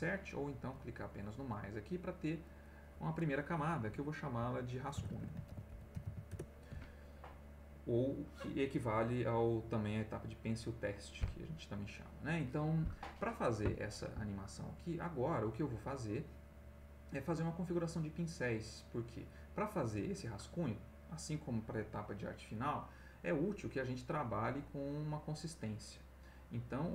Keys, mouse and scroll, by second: 2.4 click, 4.7-6.5 typing, 9.7 click.